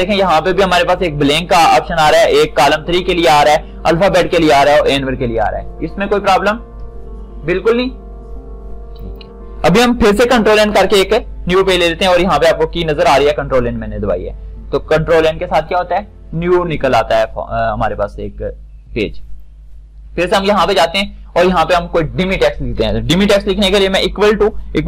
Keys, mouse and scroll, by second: 9.3 shift+click, 10.9 n, 19.5 click, 24.2 =.